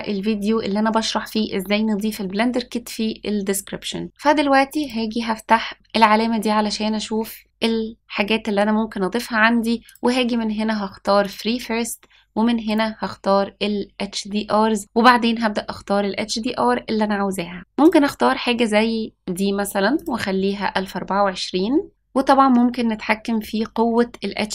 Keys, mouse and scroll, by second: 4.8 click, 9.8-11.5 drag, 12.6 click.